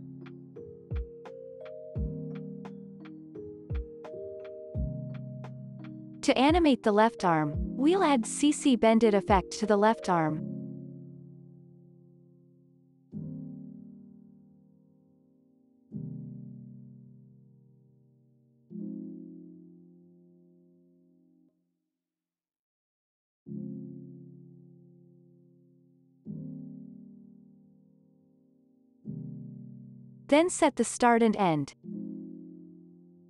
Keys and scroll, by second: 3.8 space, 4.0 ctrl+s, 6.2 ctrl+s, 13.4 space, 14.4 ctrl+s, 20.2 ctrl+space, 21.6 ctrl+space, 22.5-23.9 typing, 24.1 Return, 24.5 ctrl+s, 26.2 r, 30.0 space.